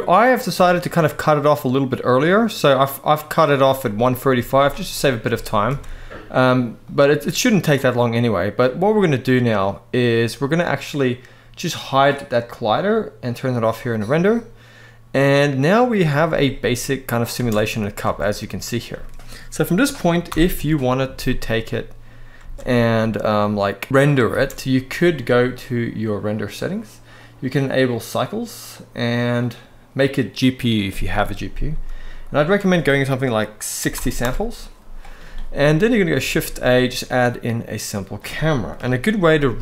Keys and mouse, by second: 0.1-3.1 drag, 3.7-4.0 middle drag, 4.0 z, 4.6 middle drag, 5.0 shift+middle drag, 5.4 alt+a, 5.7 middle click, 7.1-7.6 right drag, 8.6-9.6 middle drag, 12.4 click, 13.2 click, 13.9-15.7 middle drag, 16.0 space, 17.0 space, 17.2-17.8 middle drag, 17.8 alt+a, 18.1-18.7 middle drag, 20.0 shift+Left, 20.2 KP_1, 20.8 z, 22.1 space, 24.0 space, 26.9-27.8 drag, 28.5-29.3 drag, 32.0-33.9 drag, 36.0 shift+a, 38.5 KP_3, 39.3 g.